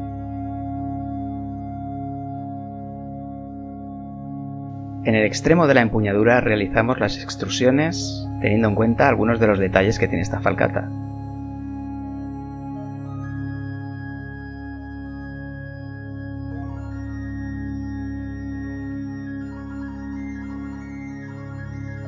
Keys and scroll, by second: 1.6 e, 2.2 r, 6.9 e, 8.3 s, 10.8 KP_1, 16.2 1, 18.7 3.